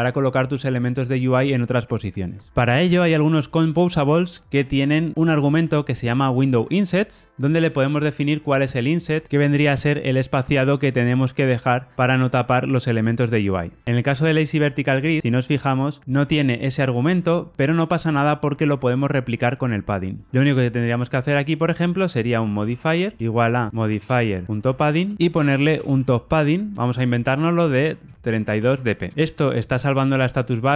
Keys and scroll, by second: 2.5 alt+super+[, 14.5 super+b, 18.9 alt+super+[, 25.1 Return, 26.6 Return.